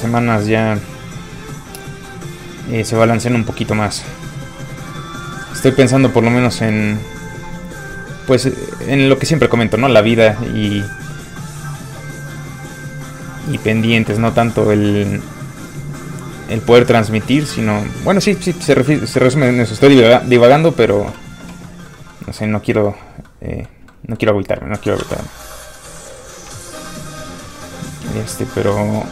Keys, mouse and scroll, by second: 3.7 alt+click, 5.1 click, 14.2 alt+Tab, 15.8 click, 21.7 middle click, 24.3-24.6 scroll up 1, 24.6 middle click, 25.0 z, 25.4 middle click, 26.5 alt+shift+middle click, 27.8 shift+scroll down 1, 27.8 f, 28.0 click, 28.7 f, 28.9 click.